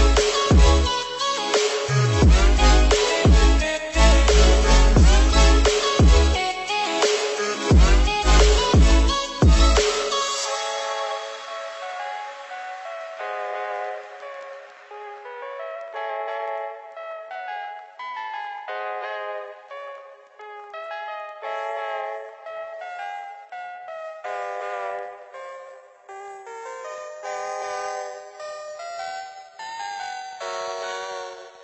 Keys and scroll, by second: 4.2 ctrl+-, 9.7 Left, 12.1 ctrl+BackSpace, 12.3 ctrl+=, 15.6 ctrl+0, 25.7 ctrl+=.